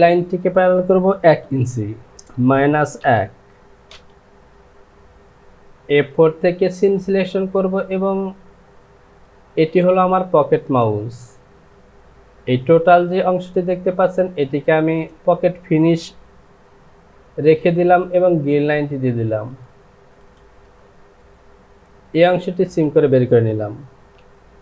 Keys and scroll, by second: 2.1 Down, 2.3 KP_Subtract, 3.0 KP_1, 24.3 j.